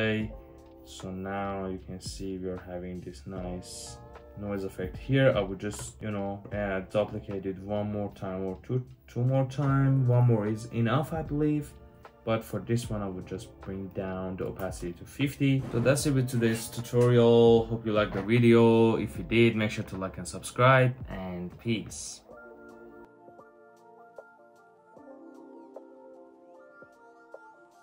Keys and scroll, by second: 5.6 super+j, 7.3 super+j, 10.0 super+z, 14.0 typing, 14.3 Return.